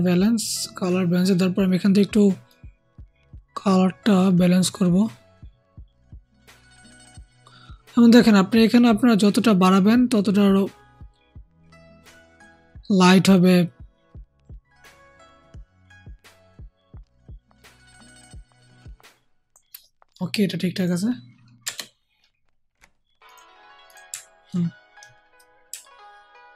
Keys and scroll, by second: 21.6 BackSpace.